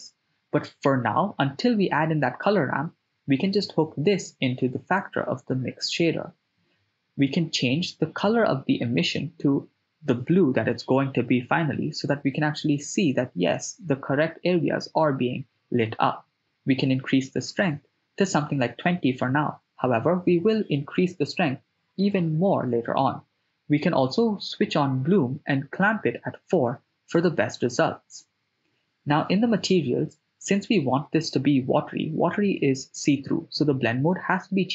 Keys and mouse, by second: 0.1-1.9 drag, 3.0 middle click, 4.4 ctrl+shift+click, 4.9 middle click, 9.5 ctrl+middle click, 10.2 middle click, 11.5 click, 15.1 click, 15.5-16.8 drag, 18.7 click, 19.6 click, 20.6 click, 21.0 drag, 21.9-23.0 drag, 24.3 middle click, 26.8 click, 28.8 click, 30.1-32.2 drag.